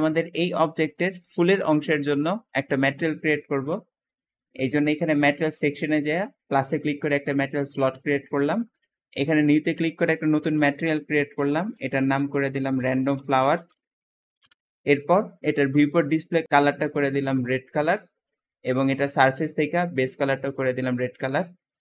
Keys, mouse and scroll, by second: 0.5 `, 2.9 click, 3.3 Escape, 4.8-7.6 drag, 8.3 click, 9.3 click, 10.1-14.8 typing, 10.3 click, 15.4-15.7 drag, 15.7-16.4 scroll down 3, 16.4 click, 17.0 click, 18.1 click, 18.8 click, 19.3-20.2 scroll down 2, 20.3 click, 21.1 click.